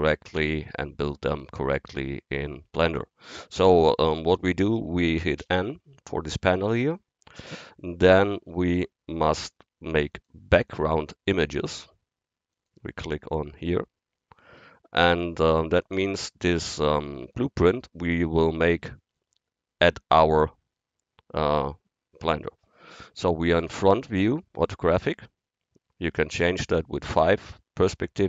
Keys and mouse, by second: 5.4 n, 8.2-10.1 drag, 10.2-14.5 drag, 27.2 KP_5.